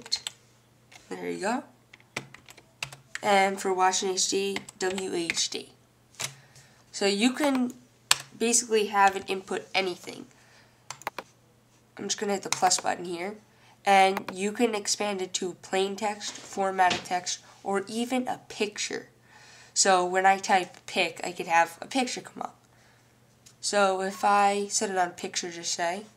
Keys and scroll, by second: 0.0-0.4 typing, 4.8-6.7 typing.